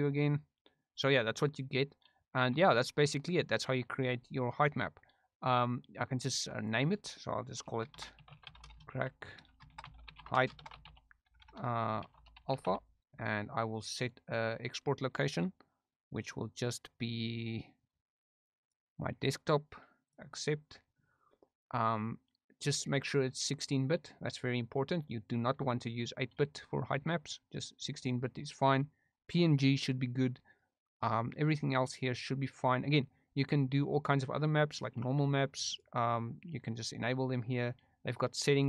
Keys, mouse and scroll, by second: 6.5 middle click, 6.6-14.1 drag, 11.4 BackSpace, 11.6 BackSpace, 14.2 click, 35.7 middle drag, 38.5 click.